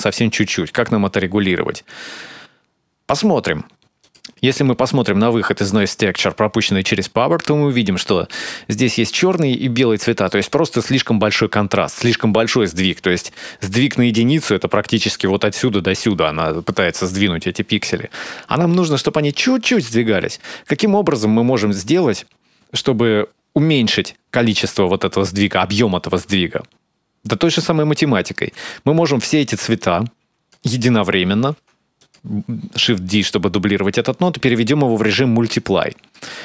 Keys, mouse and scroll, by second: 3.8 ctrl+shift+click, 4.3 shift+middle click, 4.3 scroll down 5, 7.0-7.6 scroll up 4, 12.2-13.0 scroll down 5, 13.0-14.3 scroll down 2, 20.6-21.1 scroll up 2, 29.6 click, 31.3 shift+d, 33.7 middle click, 33.7 click.